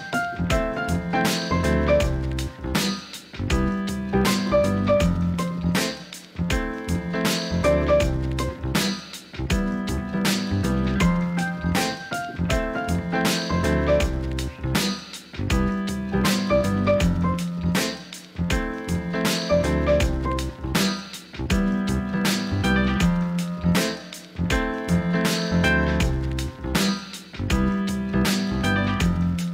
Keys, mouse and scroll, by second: 4.7 KP_7, 5.5 shift+middle click, 6.7 g, 10.2 click, 11.5 alt+shift+click, 11.9 click, 12.3 alt+shift+click, 13.1 s, 14.1 click, 16.0 alt+shift+click, 17.7 KP_1, 18.5 click, 18.8 Tab, 19.9 click, 20.1 Tab, 20.4 Tab, 20.7 Tab, 21.1 Tab, 21.2 click, 22.1-22.9 drag, 23.2 Tab, 23.7 middle click, 24.8 middle click, 25.5 shift+middle click, 26.0 shift+middle click, 27.3 alt+shift+click, 27.9 KP_1.